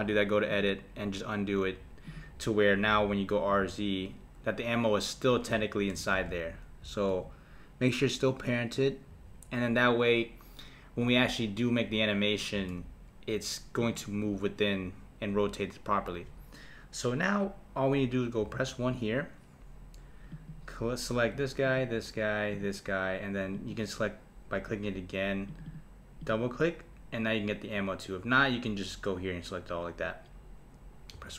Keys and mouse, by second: 0.5-2.1 drag, 2.9 r, 6.1 shift+z, 6.8 r, 12.6 shift+z, 13.8 click, 18.4 KP_1, 20.3 click, 21.6 shift+click, 22.5 shift+click, 23.5 shift+click, 25.5 shift+click, 25.7 shift+click, 26.2 shift+click, 31.1 KP_1.